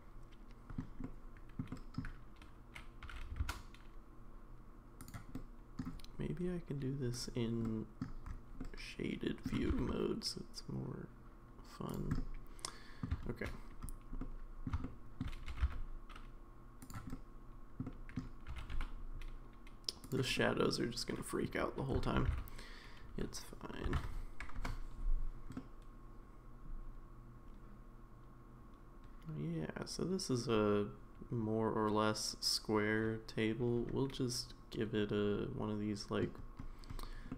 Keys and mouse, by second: 1.0 middle click, 1.7 middle click, 3.0 g, 5.3-5.8 middle drag, 7.2 click, 7.7-8.0 middle drag, 8.6-9.5 middle drag, 9.6 g, 12.2 middle click, 14.2 middle click, 14.8 shift+middle click, 15.5 g, 17.1 middle click, 17.8 middle click, 18.5 g, 20.4-21.4 middle drag, 22.2 r, 25.5-36.2 middle drag.